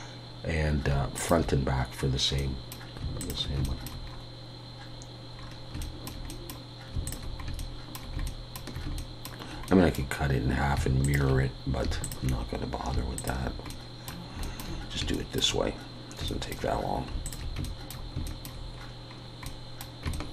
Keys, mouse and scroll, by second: 2.4 middle click, 3.2 alt+shift+click, 3.6 shift+middle click, 4.1 scroll up 2, 5.4 scroll down 1, 5.7 scroll down 2, 5.8 shift+middle click, 7.1 alt+shift+click, 7.6 shift+middle click, 9.7 middle click, 11.0 alt+shift+click, 13.7 middle click, 14.4 shift+middle click, 17.2 alt+shift+click, 17.6 shift+middle click, 18.8 scroll up 1, 19.4 scroll up 3, 19.4 middle click, 20.1 shift+middle click.